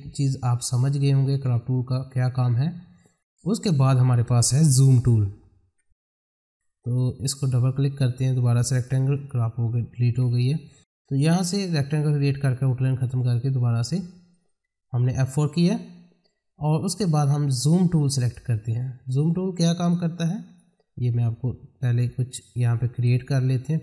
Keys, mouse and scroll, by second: 3.1-5.6 drag, 5.6 F4, 6.3 click, 9.1 right click, 10.1 F4, 18.2 click, 22.9 right click.